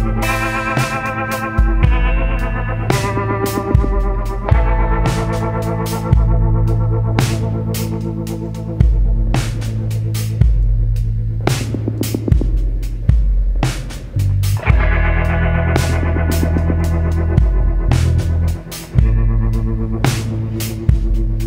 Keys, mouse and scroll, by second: 0.2 click, 1.1-2.1 drag, 3.7-6.9 ctrl+drag, 7.1-7.7 ctrl+scroll up 4, 8.2 ctrl+scroll up 2, 9.2-10.1 ctrl+drag, 11.5 ctrl+click, 14.6-15.3 ctrl+scroll down 3, 18.1 click, 19.1-20.6 scroll up 8.